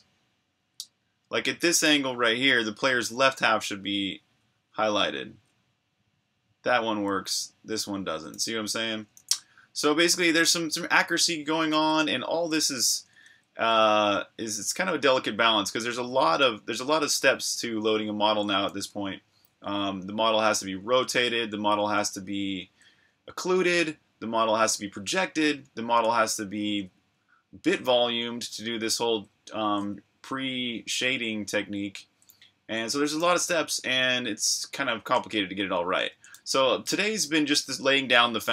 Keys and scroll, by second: 1.1 typing, 3.6 c, 4.2 c, 4.7 c, 5.3 c, 7.2-9.8 typing, 13.1-21.9 typing, 23.6 c, 25.6-26.9 typing, 28.1 typing, 30.8-35.4 typing, 37.6-38.5 typing.